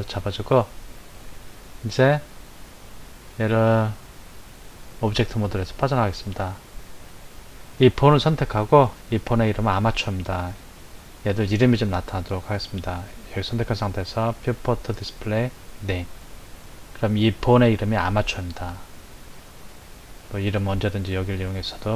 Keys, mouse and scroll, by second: 1.8 click, 3.2-5.9 drag, 7.0 click, 14.5-16.0 drag, 21.5-21.9 drag.